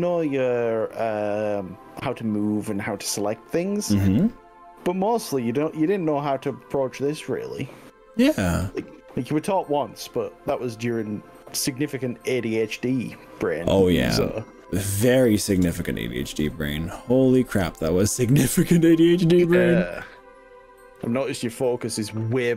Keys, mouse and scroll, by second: 2.1 middle click, 8.6-14.1 middle drag, 14.3 scroll up 3, 15.1 middle click, 15.7 shift+middle click, 16.7 scroll up 1, 17.5 scroll up 1, 17.7 shift+middle click, 20.0 click, 21.1 click, 22.0 middle click.